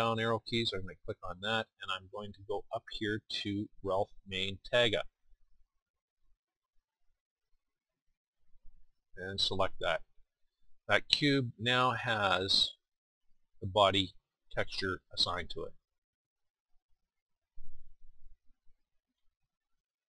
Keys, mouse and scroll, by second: 14.6 middle click, 15.7 middle click, 16.6 middle click, 17.5-19.2 middle drag, 19.2 KP_1.